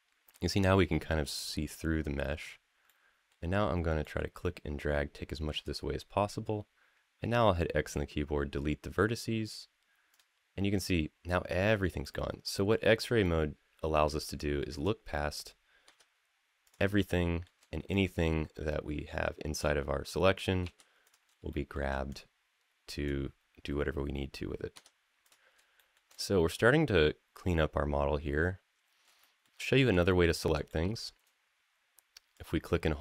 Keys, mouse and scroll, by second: 1.1-2.3 middle drag, 2.6 middle click, 3.8 middle click, 4.2-5.4 drag, 7.0 x, 9.9 click, 11.8 middle click, 13.0 shift+middle click, 14.1 click, 15.6 x, 16.9 shift+middle click, 17.7-19.4 drag, 20.4 x, 21.3 shift+middle click, 21.9-22.9 drag, 24.5 x, 25.5 shift+middle click, 25.9-28.8 middle drag, 29.0 shift+middle click, 29.3 middle click, 29.9 shift+middle click, 30.5 middle click, 31.2-32.1 scroll up 1, 32.1-33.0 drag.